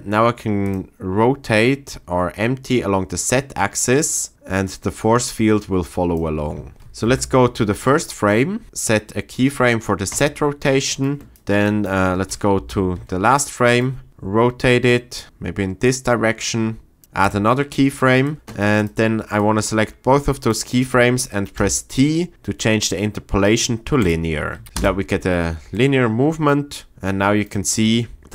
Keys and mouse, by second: 2.7-6.1 drag, 6.8 ctrl+shift+z, 7.1 shift+Left, 10.1 click, 11.7 click, 12.6 shift+Right, 14.1-17.0 drag, 17.2 click, 18.8-19.1 drag, 21.6 t, 24.6 shift+Left, 24.8 space, 25.8 middle drag.